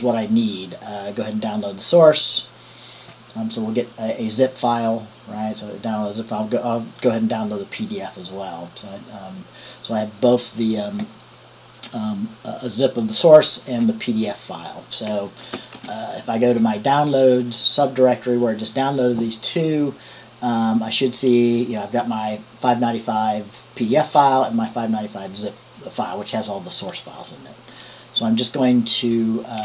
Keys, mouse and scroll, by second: 1.5 click, 7.4 click, 13.1-14.3 drag, 15.0 click, 16.0 ctrl+t, 16.7-17.8 drag, 21.1-22.8 drag, 24.8 click, 26.9 click.